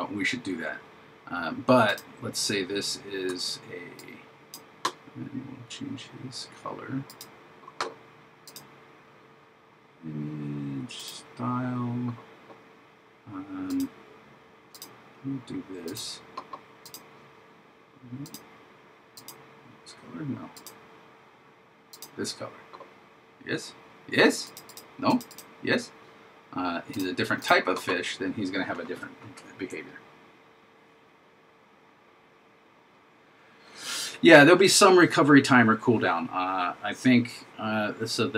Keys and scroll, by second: 3.4 super+d.